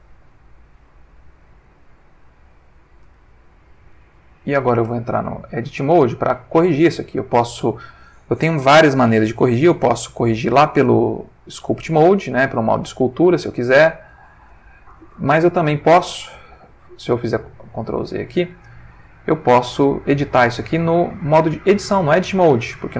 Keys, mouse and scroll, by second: 5.7 ctrl+middle click, 6.7 ctrl+shift+middle click, 7.3 ctrl+shift+middle click, 9.8 Tab, 11.7 click, 12.3-12.9 drag, 13.2 click, 14.1-14.8 drag, 14.9 click, 16.5 ctrl+z, 17.5 ctrl+z, 19.5 ctrl+Tab, 22.5 click.